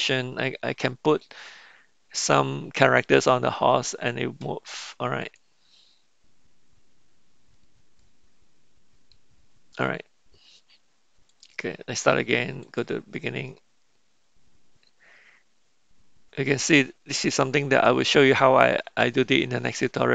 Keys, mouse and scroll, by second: 1.2-3.8 middle drag, 5.2 click, 8.9-10.0 middle drag, 13.6-14.1 drag, 18.7 middle click, 19.1-20.1 shift+middle drag.